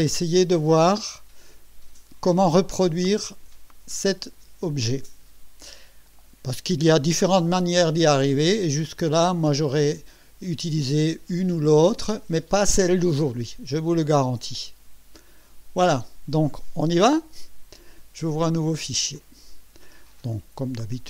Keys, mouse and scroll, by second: 19.1 click.